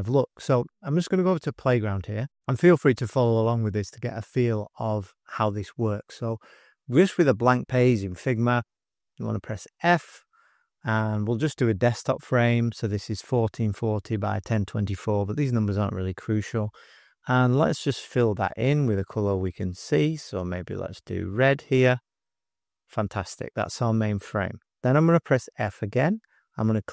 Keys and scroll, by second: 9.7 f, 18.7 f, 25.6 f.